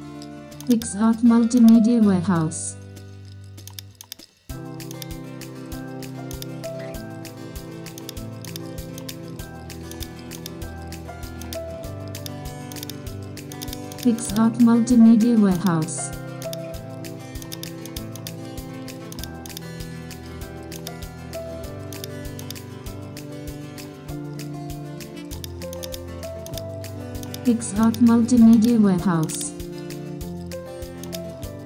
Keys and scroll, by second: 8.2 super+space, 10.8 super+t.